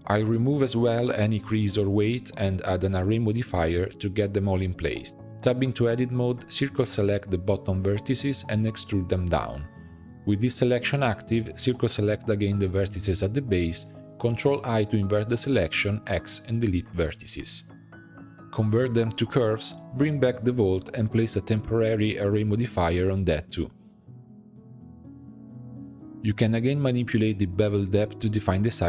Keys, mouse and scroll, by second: 0.0 scroll down 1, 0.1-0.6 middle drag, 0.6 Tab, 0.8 a, 1.8-2.9 drag, 2.9 Tab, 3.2 middle click, 4.0-4.9 drag, 4.9 middle click, 5.8 click, 6.6 c, 8.3 e, 11.6 c, 13.9 ctrl+i, 14.6 x, 15.9 middle click, 16.5 Tab, 17.6-20.6 drag, 21.1 click, 21.6 click, 22.7 click, 23.2-23.7 middle drag, 24.6-25.8 drag, 26.6-28.4 shift+drag.